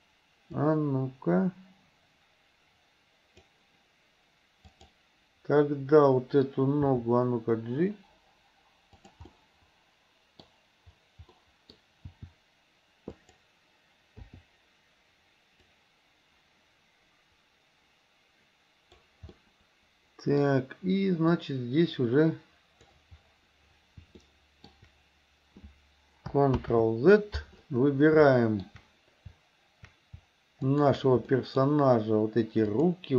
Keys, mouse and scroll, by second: 0.7-3.6 drag, 4.8 click, 6.9 g, 9.4-10.5 middle drag, 11.4 middle click, 12.1 g, 14.3 i, 15.8-19.1 drag, 19.4-20.5 middle drag, 21.5-23.0 drag, 24.3 shift+middle click, 26.6 ctrl+z, 28.3 shift+middle click, 30.6 shift+click, 31.4 shift+middle drag, 32.8 shift+click.